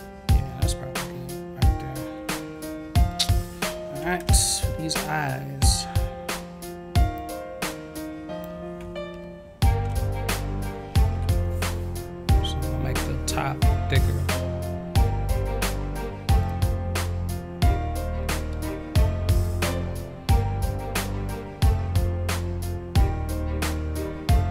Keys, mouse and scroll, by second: 3.1-4.0 scroll up 2, 5.0-5.4 scroll up 1, 7.1-8.4 drag, 16.3-24.5 drag.